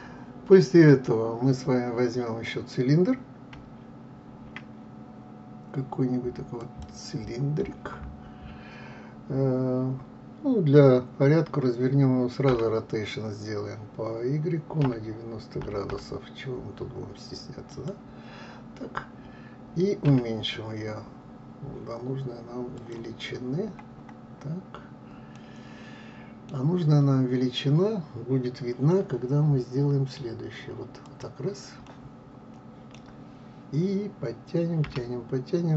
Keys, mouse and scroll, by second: 6.3 shift+a, 7.2-9.6 scroll down 8, 12.1 r, 19.6 s, 22.8-24.8 scroll up 10, 24.9-28.6 middle drag, 30.6 click, 31.4-34.4 middle drag, 34.4 g.